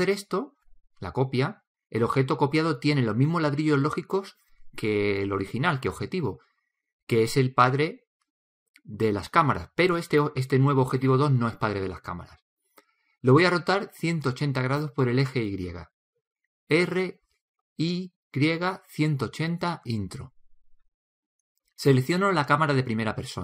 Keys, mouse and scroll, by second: 17.3 r.